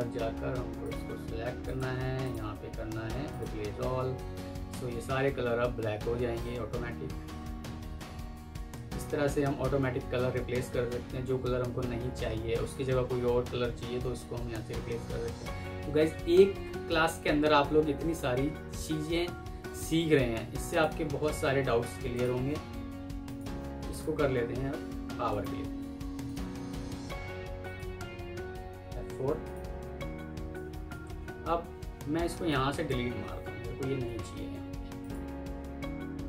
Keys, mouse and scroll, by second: 25.2 right click, 28.6 F4, 29.9 F2, 30.9 Escape, 32.4 alt+click, 33.9 Delete.